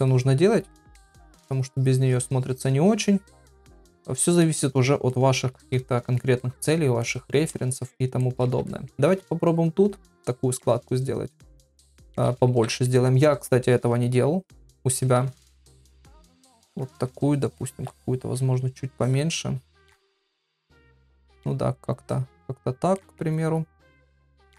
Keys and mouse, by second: 0.1 shift+click, 0.7 middle click, 1.6 shift+click, 1.9 shift+click, 2.1 shift+click, 2.4 shift+click, 2.9 shift+click, 3.4 shift+click, 3.9 shift+click, 4.4 middle click, 5.9 ctrl+middle click, 6.4 middle click, 7.0 shift+middle click, 8.2 shift+middle click, 8.7 ctrl+middle click, 10.0 click, 11.8-12.7 ], 14.5 click, 15.2 ctrl+z, 15.6 click, 16.3 ctrl+z, 16.5 click, 17.1 ctrl+z, 17.5 click, 17.9 ctrl+z, 18.4 [, 18.5 [, 19.0 click, 19.8 ctrl+z, 20.0 click, 21.3 click, 22.0 click, 23.0 ctrl+middle click.